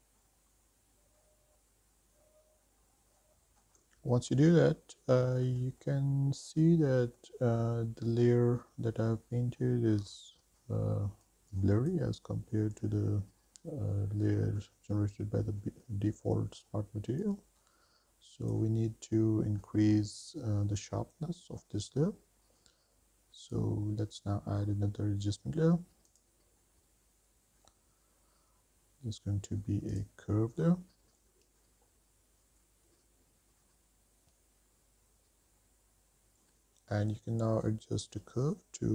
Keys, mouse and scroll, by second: 0.0-1.4 drag, 1.7 middle click, 2.0 scroll down 2, 2.3 click, 2.6 middle click, 2.8 shift+middle click, 3.0 middle click, 3.2 scroll up 2, 3.4 middle click, 3.8 shift+middle click, 5.4 middle click, 6.2 scroll up 2, 7.2 middle click, 9.8 middle click, 12.5 click, 17.8-19.3 drag, 23.8-24.1 drag, 26.3-30.3 drag, 36.6-37.1 scroll down 3, 37.5 click, 38.5 click.